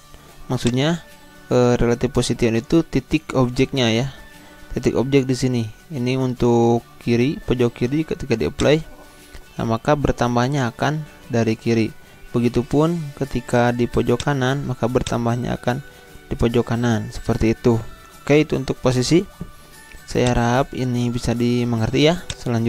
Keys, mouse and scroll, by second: 0.6 click, 8.5 click, 11.5 click, 11.7 ctrl+z, 14.1 click, 16.3 ctrl+z, 20.2 click.